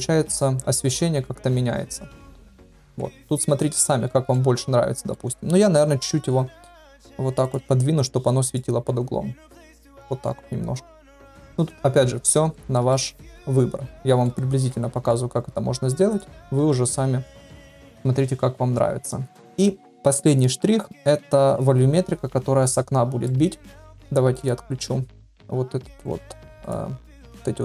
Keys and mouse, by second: 3.3 ctrl+z, 3.8 ctrl+z, 4.3-5.1 middle drag, 5.7 KP_7, 6.9 r, 7.7 g, 11.0-11.7 middle drag, 12.5 shift+middle drag, 12.9-14.3 middle drag, 14.5 g, 16.6 g, 23.2-23.6 middle drag, 24.3 click.